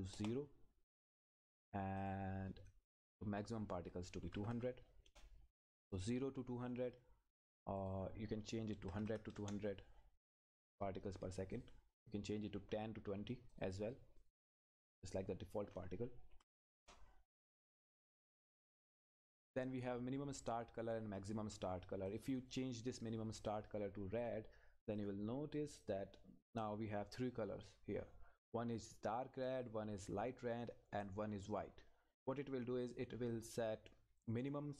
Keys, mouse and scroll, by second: 0.1 Return, 2.0 click, 5.1 Return, 7.8 click, 9.4 Return, 11.5 click, 16.8 Return, 17.8 click, 22.1 click, 27.1-28.1 scroll up 1, 29.9 scroll down 1, 32.8 click, 33.1-33.5 scroll up 1.